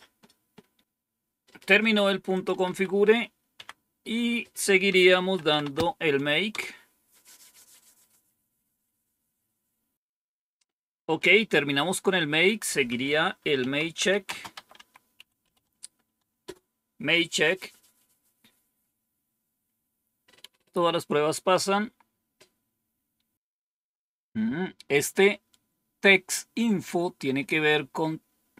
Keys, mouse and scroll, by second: 2.2 click, 2.6 Up, 3.4 Down, 4.8-6.0 typing, 6.4 Return, 11.0 Up, 12.5 Down, 13.2-15.9 typing, 16.3 Return.